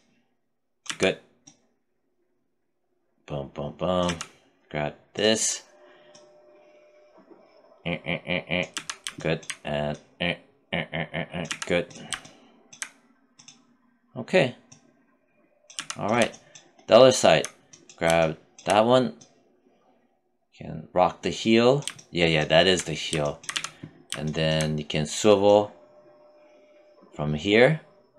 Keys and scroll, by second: 0.1 z, 3.3 z, 8.0 z, 10.7 z, 15.0 z, 22.8 z, 28.0 z.